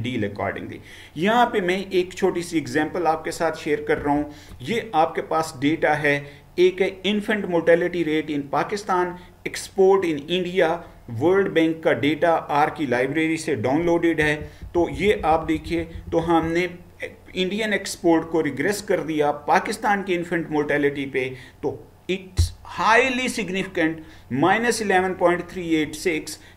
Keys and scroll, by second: 4.1 Right, 14.3 Down, 14.7 Down, 15.2 Down, 15.5 Down, 15.7 Down, 16.0 Down, 16.2 Down.